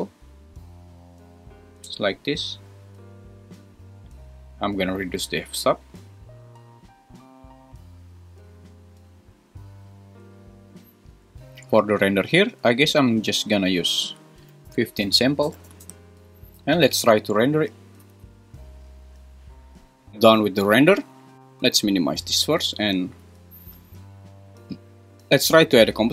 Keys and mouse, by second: 4.2-8.2 drag, 13.8-16.0 drag, 18.0 F12.